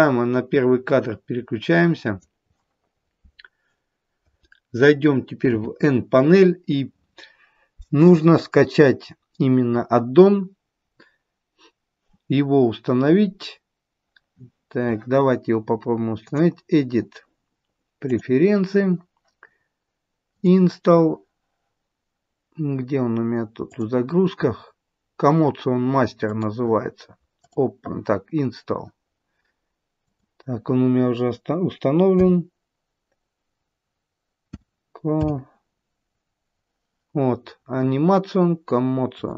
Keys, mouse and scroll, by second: 5.4 n, 16.1 click.